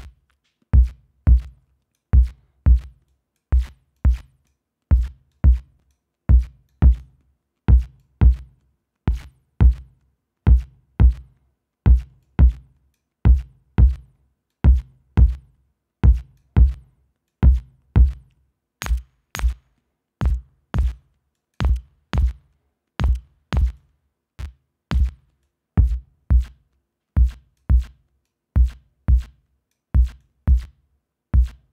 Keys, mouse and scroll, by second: 3.2-3.7 drag, 4.1 click, 5.4-6.2 drag, 6.8-7.3 drag, 8.1-10.0 drag, 12.3-13.3 drag, 14.6-16.7 drag, 17.4-21.2 drag, 21.5-21.9 drag, 23.9-25.3 drag, 25.5-27.9 drag, 28.4-30.0 drag, 30.3-30.8 drag.